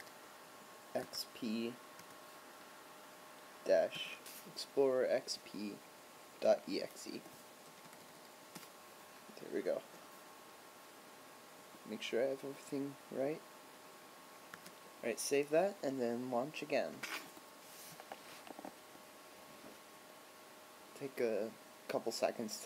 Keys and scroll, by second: 7.3 Right, 7.8 BackSpace, 8.0 BackSpace, 14.7 super+s.